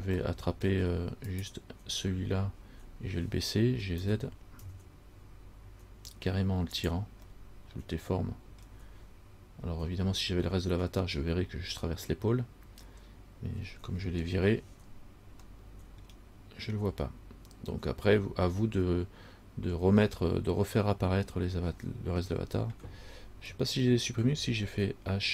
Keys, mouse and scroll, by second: 0.4 middle click, 0.4 scroll up 1, 0.8 scroll down 1, 1.5 right click, 4.2 g, 7.5 middle click, 8.2 middle click, 15.8 middle click.